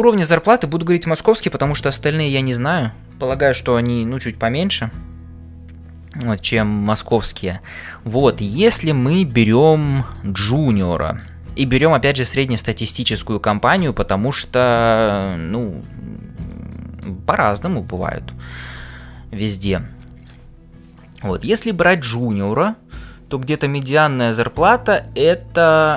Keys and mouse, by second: 8.5 shift+middle click, 9.1-10.3 middle drag, 11.0 shift+middle click, 13.5 click, 13.9 middle click, 16.4 click, 16.9 middle click, 17.3 g, 19.3 middle click, 19.7 middle click.